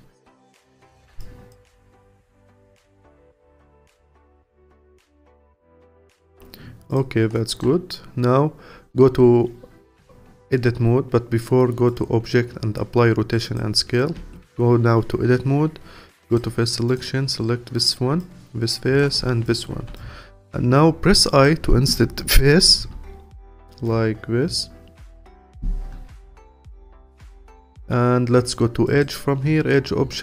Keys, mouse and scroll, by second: 1.2 alt+click, 2.1-2.5 scroll up 1, 2.5 alt+click, 4.6 click, 4.9-6.6 alt+drag, 6.6-6.9 scroll up 1, 6.9 click, 7.3 alt+middle click, 8.2-11.2 scroll down 1, 11.2 scroll down 1, 11.9-14.2 drag, 14.2 Tab, 16.3 click, 17.8-19.5 drag, 19.9-22.8 alt+drag, 22.8 i, 26.3-30.2 alt+drag.